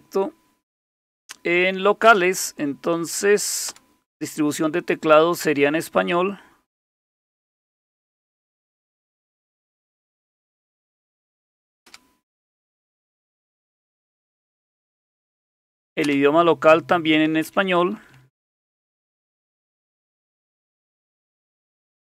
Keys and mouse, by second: 2.0 Return, 3.7 Return, 6.1 Up, 6.8 Up, 6.9 Up, 7.8 Up, 8.8 Up, 9.0 Up, 10.1 Up, 10.9 Up, 11.9 Return, 15.3 Down, 16.1 Return, 17.5 Down, 17.6 Down, 17.8 Down, 18.0 Down, 18.1 Down, 18.3 Down, 18.5 Down, 18.6 Down, 18.8 Down, 19.3 Down, 19.5 Down, 19.7 Down, 19.9 Down, 21.3 Down, 21.5 Down.